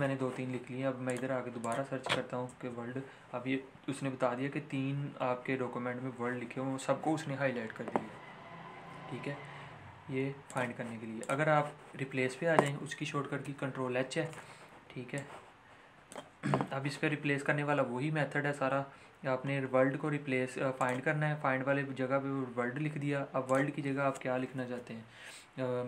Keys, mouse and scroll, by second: 1.0 click, 2.4 Return, 10.4 click, 13.4 ctrl+h, 15.1-18.3 drag, 20.7 click, 23.4 click.